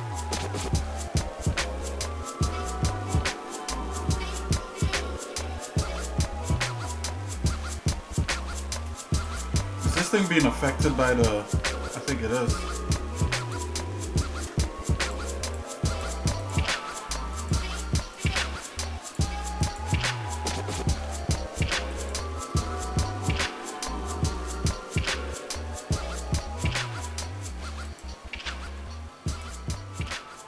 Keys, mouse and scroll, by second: 0.3 Tab, 1.0 shift+middle click, 2.1 scroll up 1, 4.0 ctrl+r, 9.7 shift+middle click, 10.6 shift+middle click, 12.4 shift+middle click, 13.4 click, 14.3 ctrl+Tab, 15.4 shift+click, 15.9 shift+click, 16.4 click, 17.3 alt+shift+click, 18.1 click, 19.1 click, 19.6 alt+shift+click, 21.0 ctrl+z, 21.9 alt+shift+click, 22.7 ctrl+Tab, 27.9 click, 29.3 shift+click.